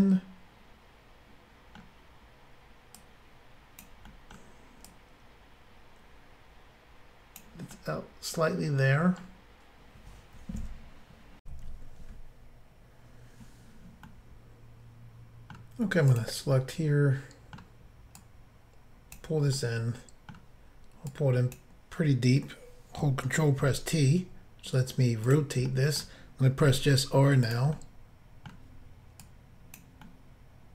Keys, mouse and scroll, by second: 3.0 click, 4.1 middle click, 4.9 click, 7.8 middle click, 11.4 Insert, 14.1 middle click, 16.1 click, 16.5 middle click, 18.2 click, 19.6 middle click, 21.1 click, 23.6 ctrl+t, 25.3 click, 25.3 click, 25.7 middle click, 26.6 r, 27.5 click, 27.8 middle click, 29.2 click, 30.0 middle click.